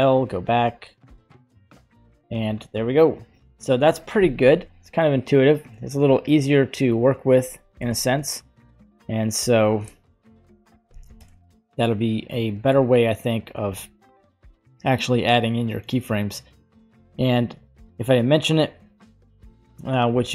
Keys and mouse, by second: 1.5 click, 7.9 shift+Left, 9.6-11.3 drag, 13.6 click, 14.5-16.7 middle drag, 17.1 alt+i.